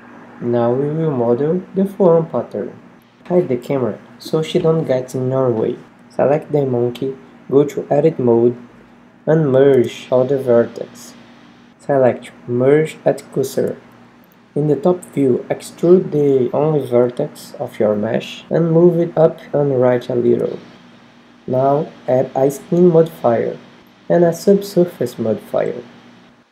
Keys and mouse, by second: 0.1 middle click, 2.8 h, 4.3 Tab, 4.8 middle click, 5.3 shift+c, 6.9 w, 11.3 KP_7, 12.9 Tab, 13.0 h, 13.1 Tab, 14.6 e, 17.8-22.3 drag, 18.0 Tab.